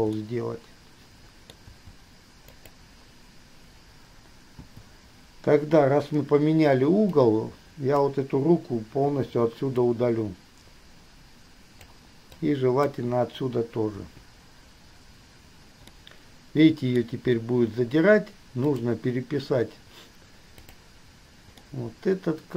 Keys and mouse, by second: 0.4-1.8 drag, 1.9 g, 4.8 i, 7.3-8.2 drag, 9.3 Delete, 10.0-12.2 drag, 12.5-13.2 drag, 14.2 Delete, 16.0-17.2 drag, 18.9 click, 20.9 drag, 21.8-22.5 drag.